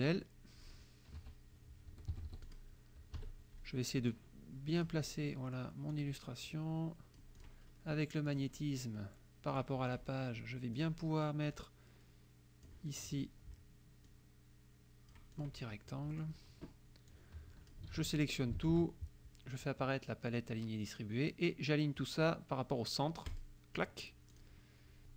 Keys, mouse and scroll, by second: 0.0 click, 1.2 KP_Subtract, 2.1 Escape, 2.5 click, 3.2 KP_Subtract, 4.1 click, 5.1 click, 6.0-7.6 drag, 8.3 click, 9.5 click, 10.0 click, 10.8 click, 11.6-12.9 drag, 14.1-15.6 drag, 16.1 middle click, 16.2 click, 17.1 click, 18.0 ctrl+a, 18.7 ctrl+shift+a, 23.3 click, 24.4 click.